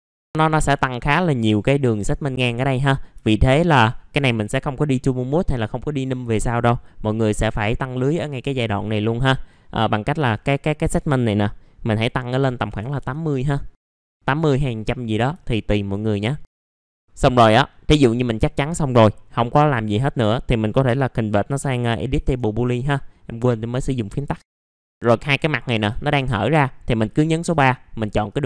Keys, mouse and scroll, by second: 0.0-1.7 scroll up 1, 2.3-3.1 scroll down 1, 3.2 alt+middle click, 9.5 click, 12.5 KP_8, 13.8 alt+middle click, 14.4 alt+middle click, 15.4 alt+middle click, 16.3 scroll up 1, 16.4 alt+middle click, 16.7 scroll down 1, 16.8-17.1 scroll up 1, 17.1 middle click, 18.3-21.6 scroll down 1, 23.7 right click, 24.6 click, 24.8 alt+middle click, 25.3 click, 25.9 alt+middle click, 28.2 click.